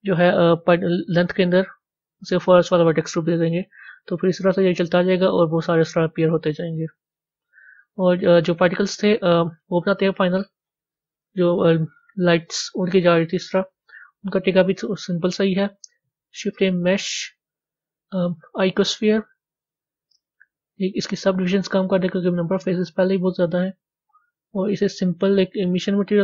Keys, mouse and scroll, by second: 2.3-5.5 drag, 9.3-11.1 drag, 11.1 scroll down 1, 12.5 scroll down 2, 13.7-14.2 scroll down 3, 23.7 click, 25.6 click.